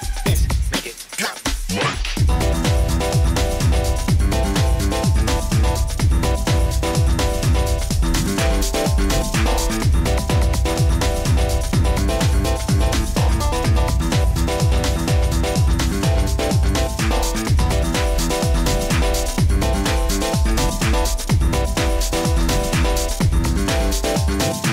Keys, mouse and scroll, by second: 0.1 middle click, 0.2 middle click, 2.5 middle click, 2.6 click, 3.7 click, 4.4 click, 5.0 click, 6.2 click, 9.1 click, 10.7 click, 12.1 middle click, 12.2 middle click, 12.4 middle click, 13.1 middle click, 14.8 click, 17.7 e, 21.3 click, 21.7 scroll, 21.8 middle click, 23.3 e.